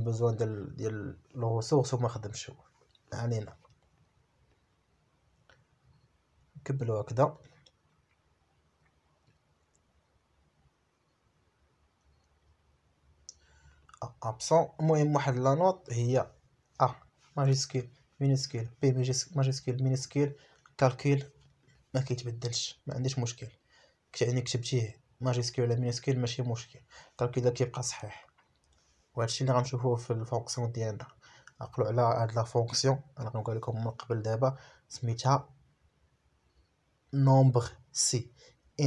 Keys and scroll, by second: 0.8 shift+c, 1.1 shift+j, 1.9 Right, 3.7 shift+c, 4.0 shift+j, 4.6 Right, 7.3 shift+c, 7.9 shift+j, 8.6 Right, 11.9 shift+a, 12.4 Right, 28.5 shift+a, 29.6 Right, 31.2 shift+p, 31.7 shift+Right, 32.1 shift+p, 32.5 Right, 33.4 shift+p, 33.9 Right, 34.6 shift+p, 35.0 Right.